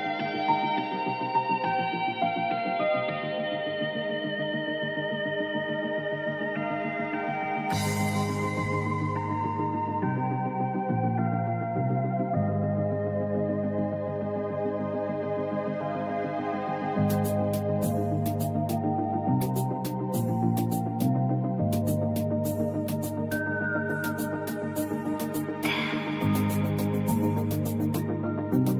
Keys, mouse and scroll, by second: 14.8 click, 17.4 click, 27.2 click, 28.3 ctrl+2.